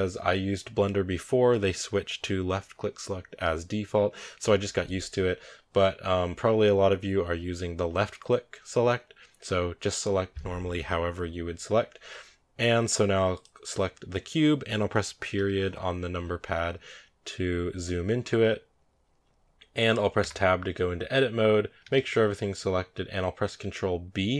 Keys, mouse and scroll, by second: 13.2 right click, 15.2 KP_Decimal, 17.0-17.9 scroll down 1, 18.0 scroll down 1, 20.0 Tab, 21.7 a, 21.8 a.